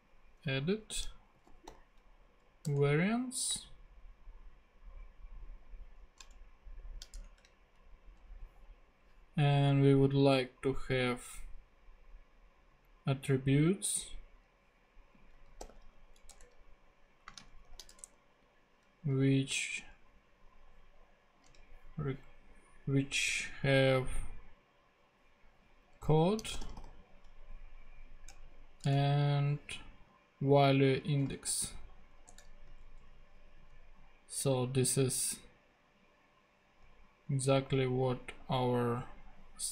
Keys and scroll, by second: 1.1-2.2 typing, 2.6 Return, 3.5 space, 6.8 shift+[, 7.1 shift+Return, 8.1 Return, 15.3 a, 15.6 t, 16.3 Return, 17.3 space, 17.6 shift+[, 17.9 shift+Return, 18.9 Return, 26.1-27.3 typing, 28.3 Return, 30.9-32.0 typing, 32.3 Return, 32.8 super+Tab.